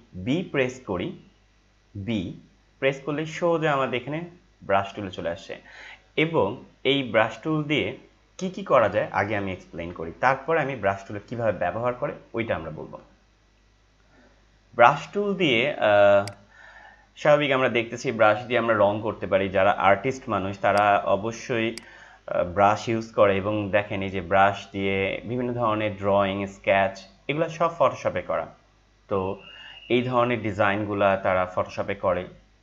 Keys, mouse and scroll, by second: 2.2 b, 16.1 click, 20.7 click, 22.0 click, 26.7 scroll down 1, 27.4 scroll down 1, 28.2 scroll down 1, 29.2 scroll down 1, 30.6 scroll down 1.